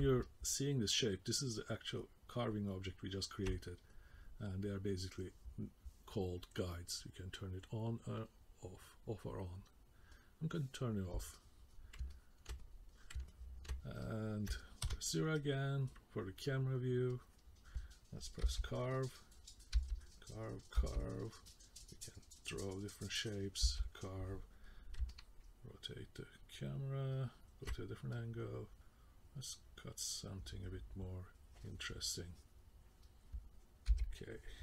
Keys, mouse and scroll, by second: 0.2 middle click, 7.2 click, 8.2 click, 10.2 click, 11.4 middle click, 12.1 ctrl+middle click, 12.6 middle click, 13.3 ctrl+middle click, 14.0 middle click, 14.8 KP_0, 17.1 click, 18.5 k, 19.0 click, 19.7 k, 20.2 click, 20.8 k, 21.5 click, 23.6 k, 25.1 alt+middle click, 28.1 click, 33.9 k.